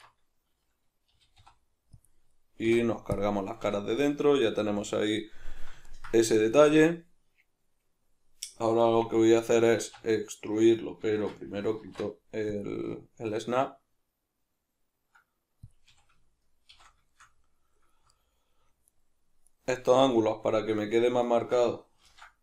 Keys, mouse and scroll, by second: 1.1 g, 2.1 click, 2.7 x, 3.7 a, 4.0-9.8 middle drag, 9.8 alt+e, 10.5 Escape, 11.1 shift+Tab, 11.8 alt+e, 15.7 click, 15.9 a, 16.7 shift+n, 17.1 shift+middle click, 18.1 alt+right click, 18.9 alt+shift+right click, 19.4 alt+shift+right drag, 20.1 alt+shift+right click, 22.0 ctrl+b.